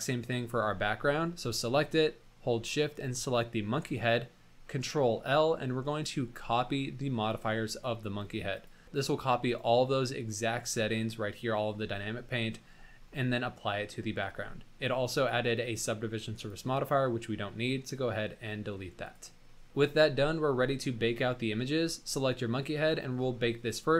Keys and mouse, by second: 2.9 shift+click, 5.1 ctrl+l, 14.0 middle click, 15.1 click, 16.4 click, 17.9 middle drag, 19.6 middle click.